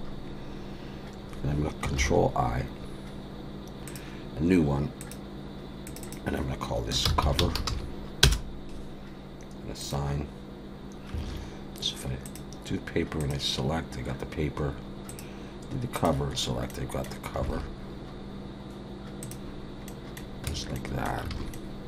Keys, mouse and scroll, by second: 2.0 ctrl+i, 3.8 click, 5.0 click, 9.8 click, 11.2 alt+a, 12.3 click, 13.2 click, 15.9 click, 16.7 middle click, 17.5 alt+a, 19.2 click, 19.9 middle click, 20.5 Tab, 20.7 middle click, 21.3 alt+a, 21.5 middle click.